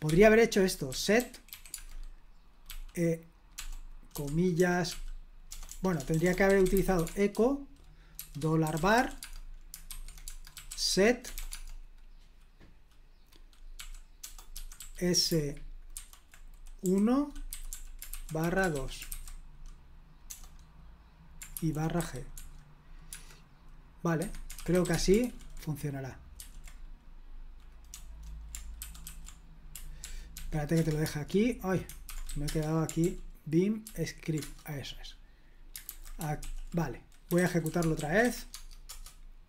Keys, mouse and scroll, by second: 0.0-11.8 typing, 13.7-20.2 typing, 21.2-22.8 typing, 24.1 Escape, 24.3-25.3 typing, 26.3 ctrl+p, 27.8 BackSpace, 28.7 ctrl+w, 29.0 ctrl+w, 29.9 ctrl+p, 30.3 ctrl+p, 30.7 Return, 31.9-32.7 typing, 33.0 ctrl+p, 33.8 ctrl+p, 34.4 Return, 35.8 super+h, 36.3 ctrl+l, 37.0-38.7 typing, 38.8 Return.